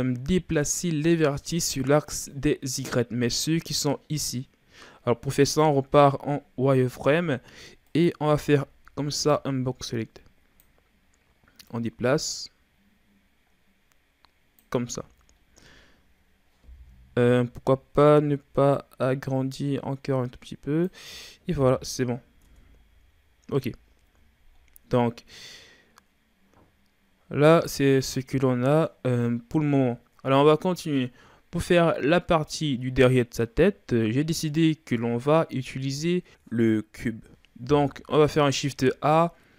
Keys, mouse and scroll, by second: 5.5 right click, 6.8 z, 7.8 right click, 8.3 b, 11.7-14.8 drag, 14.9 z, 15.4-17.1 scroll down 3, 17.7-18.7 scroll up 2, 18.7-21.6 drag, 21.6 KP_1, 22.5 Tab, 23.0 a, 23.6 a, 23.9-24.6 scroll down 3, 24.6-25.1 ctrl+scroll up 3, 25.1-29.2 middle drag, 37.3 middle click, 37.8 KP_1, 38.5 shift+a.